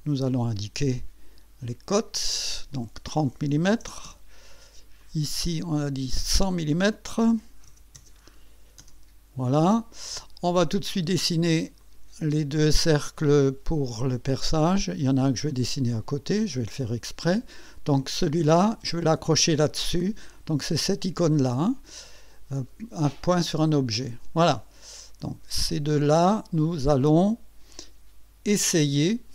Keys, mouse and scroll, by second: 1.7 click, 3.4 KP_3, 3.7 KP_0, 4.1 KP_Enter, 5.0 click, 6.3 click, 7.3 KP_1, 7.7 KP_0, 7.7 KP_1, 7.8 KP_0, 11.8 click, 13.8 click, 14.6 click, 15.5 click, 16.4 click, 17.1 right click, 18.1 click, 19.1 click, 23.5 click, 26.0 click, 29.1 click.